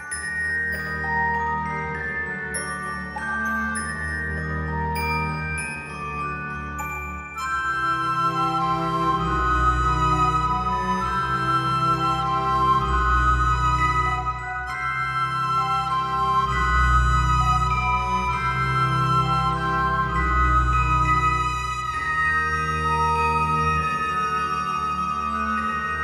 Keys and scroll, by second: 11.2 alt+x.